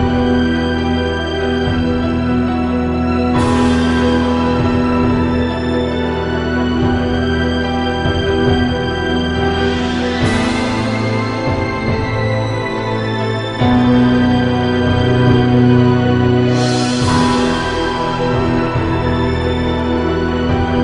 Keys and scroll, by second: 1.0 i, 2.7 -, 5.8 i, 13.5 -, 18.8 -.